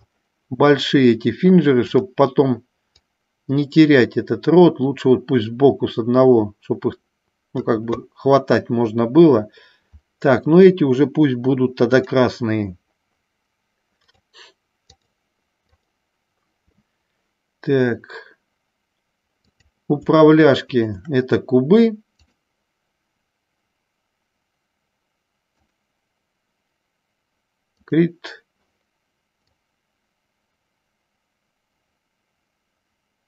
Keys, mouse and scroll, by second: 3.0-7.9 drag, 12.2 click, 14.3 click, 16.0 click, 19.5-20.6 drag, 20.9-22.0 shift+drag, 22.5-26.0 drag, 27.9 click, 29.6-33.2 drag.